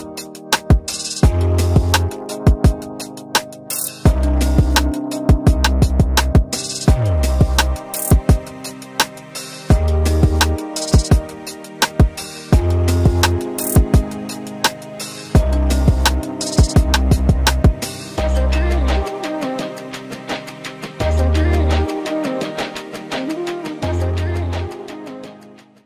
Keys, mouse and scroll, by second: 5.3 ctrl+x, 7.0 Delete, 7.2 ctrl+v.